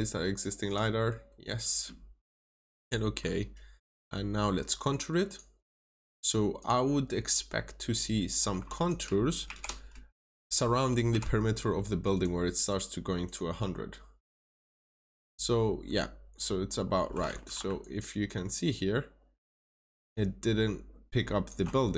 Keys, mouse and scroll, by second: 3.0-3.7 scroll down 1, 4.0 middle click, 5.2 click, 9.4 typing, 10.3 click, 11.7 typing, 12.0 click, 15.4-16.6 scroll up 1, 16.6-17.0 scroll down 1, 17.0 middle click, 17.7 ctrl+shift+click, 21.6-21.9 ctrl+shift+scroll up 2.